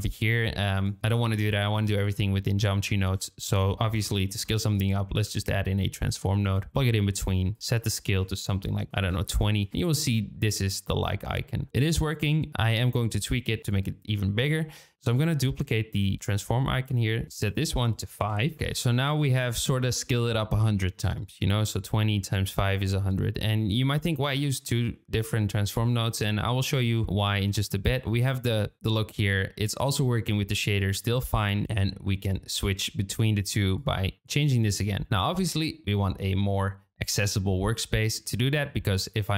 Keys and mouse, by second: 3.4 shift+a, 7.5-9.6 drag, 14.9 shift+d, 17.4-18.5 drag, 19.0 shift+middle click, 28.0 z, 33.0 shift+middle click, 33.7-34.9 drag.